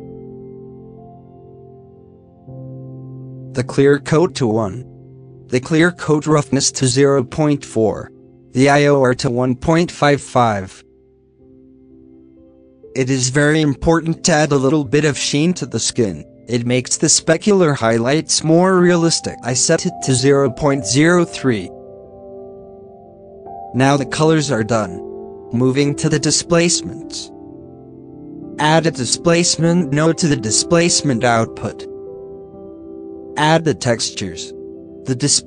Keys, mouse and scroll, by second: 0.1 KP_5, 2.2-3.5 middle drag, 3.5 click, 4.1 click, 6.6-8.9 drag, 11.5 click, 12.5 KP_5, 14.1 middle click, 14.5-14.8 scroll down 2, 14.8-16.1 middle drag, 16.1-17.1 scroll up 2, 17.1-18.2 drag, 19.9 scroll down 2, 20.3 middle click, 20.5 scroll up 2, 21.0-21.3 scroll down 9, 21.5-22.4 middle drag, 22.4 scroll up 6, 23.1-23.5 scroll down 11, 24.0 click, 24.4 shift+d, 25.4 middle click, 25.6 scroll up 5, 26.2 click, 26.4 g, 26.9 shift+a, 29.8 scroll up 6, 30.2 click, 30.4-30.8 scroll down 6, 30.9 scroll up 1, 31.2-31.7 middle drag, 31.7 click, 32.5 scroll, 32.7 shift+a, 34.9 scroll up 6.